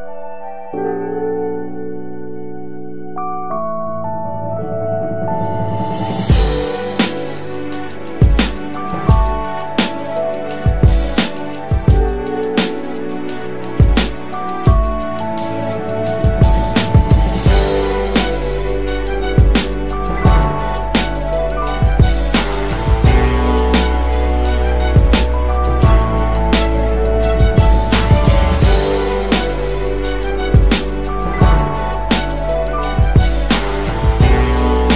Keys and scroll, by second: 16.8 Down, 17.7 Up, 22.6 ctrl+alt+o, 28.8 ctrl+shift+].